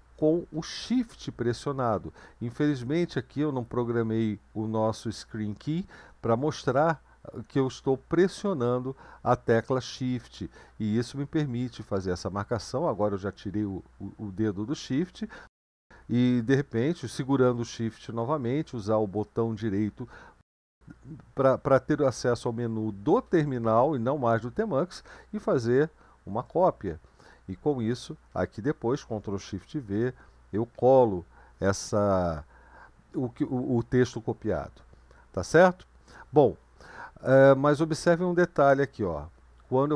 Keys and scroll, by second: 29.3 ctrl+v, 32.2 BackSpace, 32.8 BackSpace, 32.9-35.4 BackSpace.